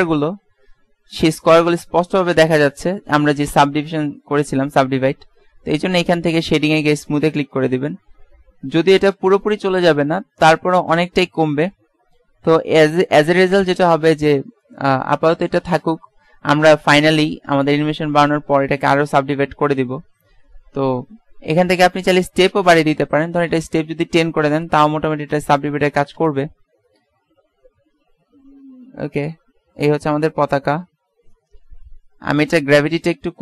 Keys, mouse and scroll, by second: 2.0 middle click, 7.1 click, 8.0 middle click, 9.3 middle click, 12.6 KP_1, 22.7-24.3 drag, 25.8 click, 26.2 alt+a.